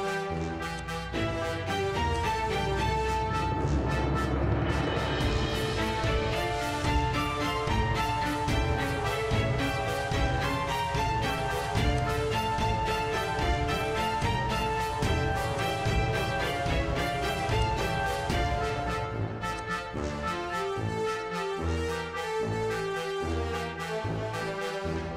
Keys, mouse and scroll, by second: 0.8 click, 2.2 click, 8.8 click, 12.0 click, 14.2 click, 15.6 click, 16.4-17.1 typing, 17.6 click, 21.7 click, 22.5 Return.